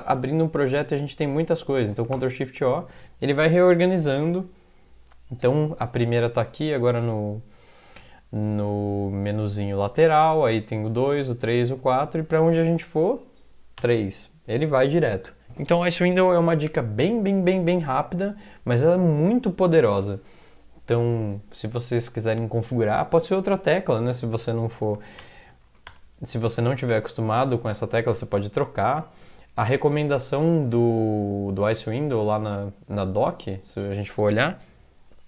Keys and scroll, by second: 1.9 ctrl+x, 2.1 o, 13.8 3, 25.0 ctrl+x, 25.2 0, 25.6 ctrl+x, 25.9 0, 26.9 ctrl+\, 27.9 Left, 28.4-28.9 Left, 30.0 Right, 32.3 alt+Tab.